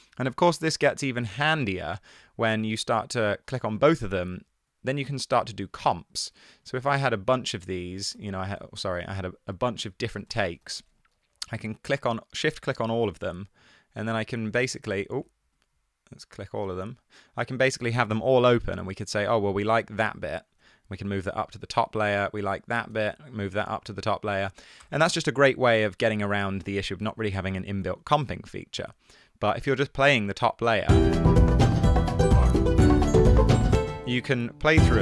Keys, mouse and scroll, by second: 1.7 click, 3.0 click, 7.9 super+d, 8.7 super+z, 10.2 super+d, 11.0 super+d, 14.7 e, 14.9 e, 16.8 e, 20.0 super+e, 23.0 super+e, 24.9 BackSpace, 25.3 super+z, 28.7 1, 29.9 e, 32.5 e, 33.8 space, 33.9 e.